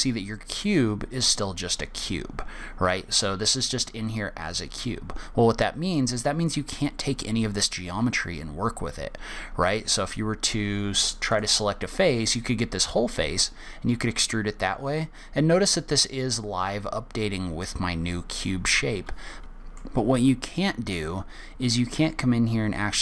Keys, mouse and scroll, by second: 5.1-6.8 scroll up 1, 6.8 click, 11.6 click, 12.1 click, 13.2 e, 19.4 ctrl+z, 19.4 click, 19.7 middle click.